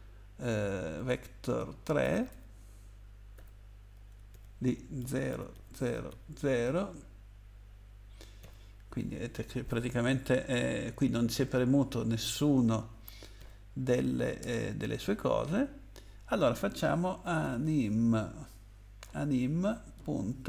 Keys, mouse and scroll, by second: 1.8-6.1 typing, 8.4 ), 13.4 :, 14.4 Return, 17.2-17.6 typing, 19.0 m, 20.0 ..